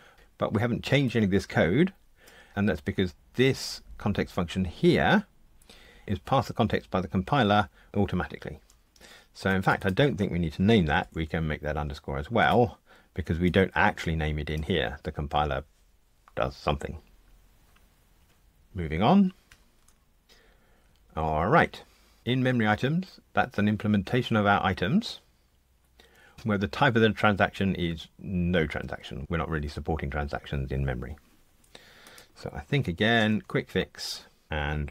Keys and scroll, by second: 19.5 super+F9, 33.2 alt+Return.